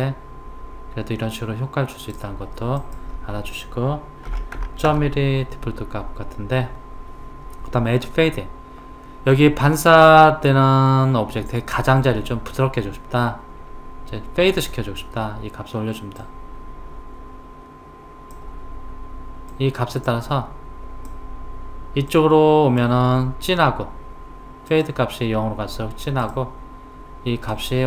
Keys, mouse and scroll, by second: 2.8 click, 16.2 click, 19.5-25.1 drag, 27.5 click.